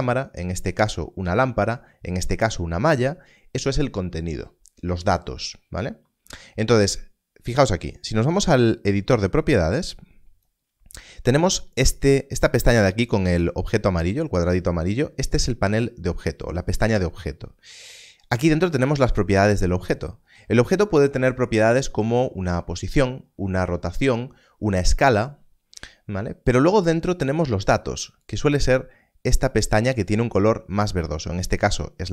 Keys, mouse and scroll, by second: 9.6 click.